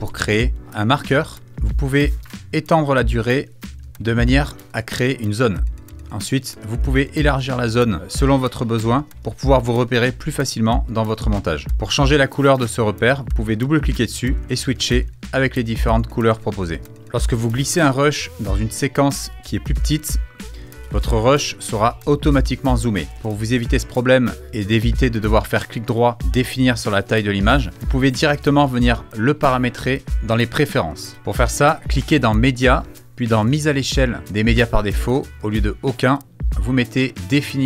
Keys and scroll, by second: 27.8 super+z.